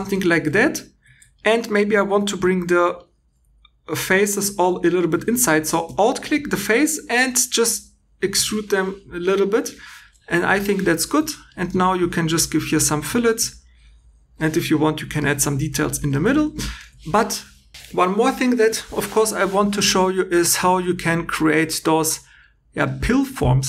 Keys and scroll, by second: 0.3 3, 11.1 2.